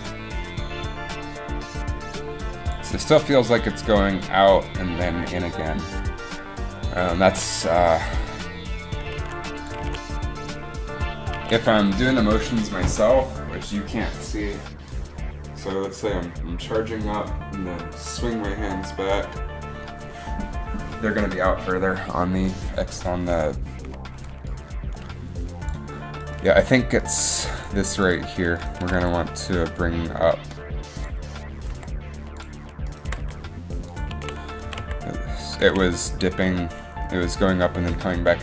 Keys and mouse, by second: 7.0 click, 7.4 alt+a, 7.5 alt+a, 9.4 alt+a, 9.9 alt+a, 11.6 alt+a, 24.6 click, 27.7 r, 29.1 g, 31.9 r, 33.4 g, 34.8 g, 34.8 a, 36.2 a.